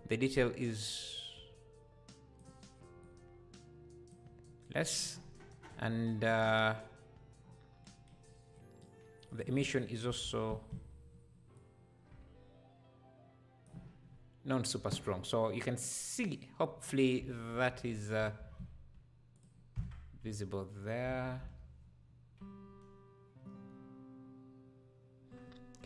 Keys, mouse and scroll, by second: 0.4-4.7 drag, 5.1-5.8 scroll down 13, 6.4 scroll up 2, 7.4 scroll down 1, 8.6 click, 9.3-14.6 drag, 16.2 click, 17.2 KP_7, 17.5 Tab, 17.9 scroll down 2, 18.4 shift+d, 19.8 Tab, 21.1 alt+a, 21.4 KP_0.